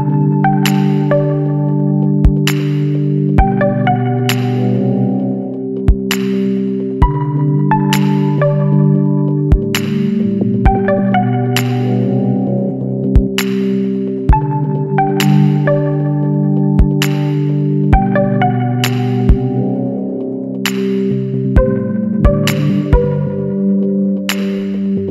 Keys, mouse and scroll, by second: 1.4-4.6 drag, 5.2-5.7 middle drag, 5.7 scroll down 1, 5.9-6.6 middle drag, 6.6-8.1 scroll up 1, 8.1 scroll down 1, 8.2 middle drag, 8.4-8.7 scroll up 1, 8.7 middle click, 9.2-9.6 scroll down 3, 9.6-10.2 middle drag, 10.2 n, 11.7 click, 13.2-14.3 middle drag, 14.3 ctrl+a, 15.3-18.4 middle drag, 18.7 click, 19.1 click, 22.1-24.2 middle drag, 24.2 click, 24.8-25.1 drag.